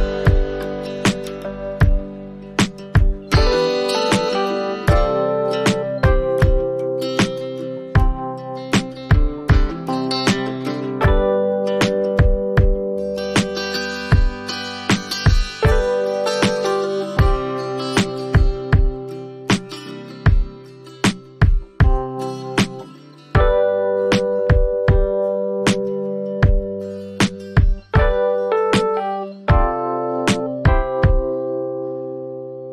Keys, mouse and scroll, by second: 0.8 click, 10.7-12.2 click, 11.7 click, 12.3 click, 13.1 click, 13.9 click, 15.9 click, 23.5 click, 25.6 click, 27.5 click, 31.3 click, 32.1-32.7 typing.